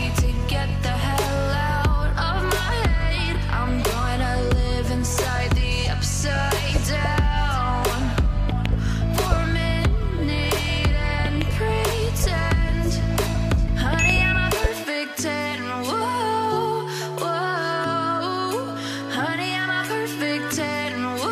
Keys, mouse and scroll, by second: 1.3 Return, 2.6 shift+click, 4.3 ctrl+t, 6.1 Return, 6.6 v, 7.9 BackSpace, 16.9 Return, 17.7 Up, 17.9 Up, 20.0 double click, 21.1 typing.